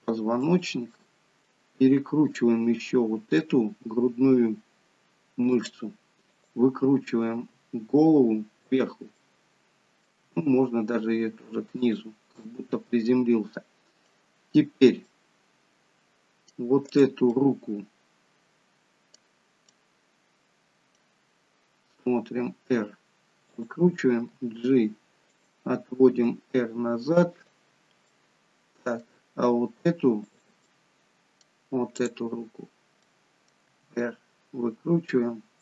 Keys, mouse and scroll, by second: 1.0 middle click, 2.3 click, 2.8 middle click, 3.9 r, 6.3 click, 7.4 r, 9.2 middle click, 10.3 r, 12.5 middle click, 15.0 middle click, 16.9 click, 17.3 middle click, 19.7 middle click, 19.7-20.4 scroll up 2, 21.9 r, 24.3 g, 26.1 r, 28.1 middle click, 30.3 click, 30.7 middle click, 32.0 click, 33.1 middle click, 33.7 r.